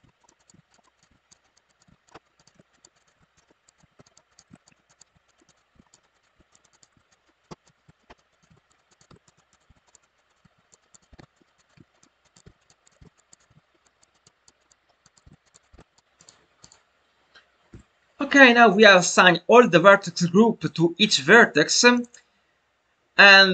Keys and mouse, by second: 0.4 click, 1.0 click, 1.3 click, 2.4 click, 3.0 click, 3.8 click, 4.4 click, 5.0 click, 5.5 click, 6.2 click, 6.6 click, 7.6 click, 8.4 click, 9.0 click, 9.5 click, 10.3 click, 11.0 click, 11.5 click, 12.3 click, 12.9 click, 13.4 click, 14.0-15.4 drag, 15.6 click, 16.6 click, 21.9 click.